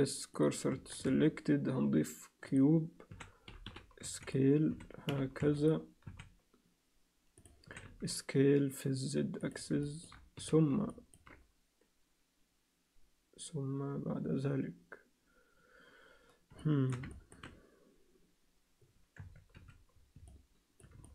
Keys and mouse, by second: 0.7 Tab, 1.1 shift+a, 3.1 s, 4.7 s, 6.0 s, 7.7 s, 9.8 alt+shift+middle click, 10.4 z, 10.9 ctrl+alt+middle click, 16.6 alt+shift+middle click, 17.1 ctrl+alt+middle click, 19.2 Tab, 19.5 z, 20.3 alt+middle click, 21.0 alt+shift+middle click.